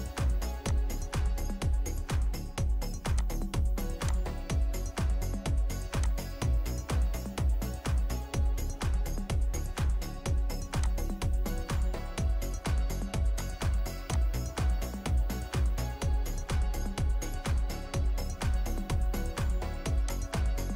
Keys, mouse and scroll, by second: 1.8 middle click, 4.8 middle click, 5.4-6.0 scroll up 1, 6.8 middle click, 7.4 scroll up 1, 7.7 scroll down 1, 8.2 middle click, 8.9-9.2 scroll down 1, 11.3-11.9 scroll up 1, 11.9 middle click, 12.3-12.7 scroll up 1, 12.7-13.0 scroll down 1, 15.1-15.5 scroll up 1, 16.4-16.7 scroll down 1, 16.7 scroll up 1, 17.0 middle click, 17.8-19.9 scroll down 1.